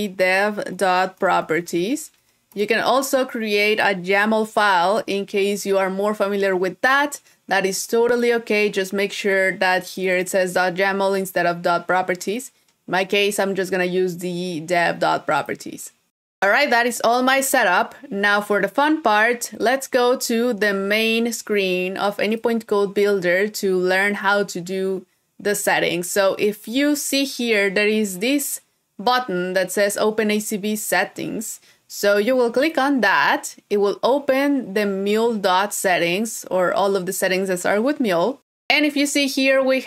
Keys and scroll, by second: 4.4 super+v, 5.4 super+s.